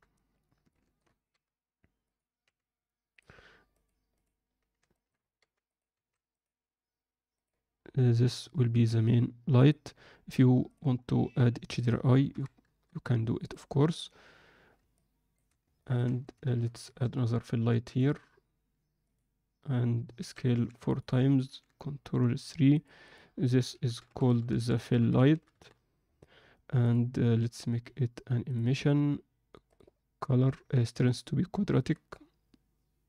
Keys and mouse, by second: 0.6-1.0 shift+middle drag, 1.2 g, 2.4 r, 3.7-4.2 drag, 4.9 alt+shift+middle click, 5.4 g, 5.9 s, 9.7-10.7 drag, 11.8 click, 13.8-14.9 drag, 15.8 ctrl+alt+middle click, 20.2 s, 21.4 ctrl+3, 22.7 click, 23.3-28.5 drag, 24.2 l, 29.7-33.0 drag.